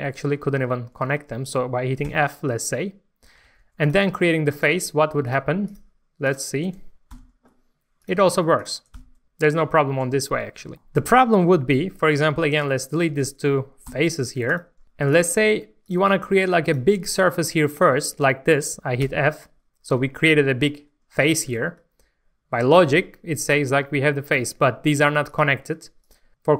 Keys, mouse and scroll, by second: 2.0 f, 3.4 alt+a, 3.8 click, 5.2 shift+click, 5.7 shift+click, 6.2 shift+click, 7.1 shift+f, 8.0 click, 8.5 shift+click, 8.9 f, 12.4 3, 12.7 click, 13.2 shift+click, 13.9 x, 14.8 1, 15.0 click, 15.8 shift+click, 16.6 shift+click, 17.6 shift+click, 19.0 f, 21.5 alt+a, 21.8 Tab, 22.4 scroll down 1, 22.5 Tab, 24.6-25.2 scroll up 1, 25.2 click, 26.0 shift+click, 26.3 middle click.